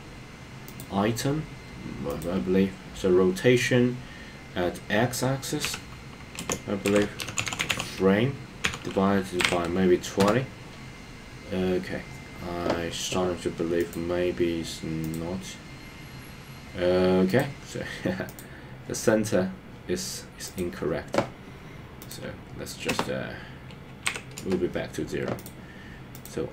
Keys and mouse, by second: 2.1-10.2 drag, 13.9 click, 15.1 click, 18.4 click, 22.2-24.6 drag, 26.2 click.